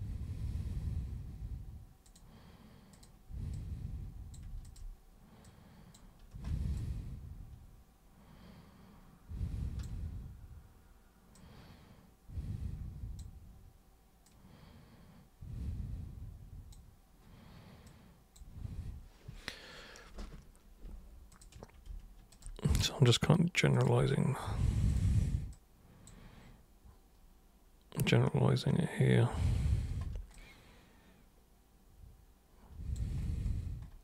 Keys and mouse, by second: 2.1 super+click, 2.9 super+click, 3.5 super+click, 4.6 shift+super+click, 5.4 super+click, 6.7-9.8 alt+super+drag, 11.3-13.1 super+drag, 14.2-16.7 super+drag, 17.8 super+click, 21.3 super+click, 22.3 shift+super+click, 23.7 super+click, 24.9 shift+super+click, 25.5 super+click, 30.3-32.9 alt+super+drag.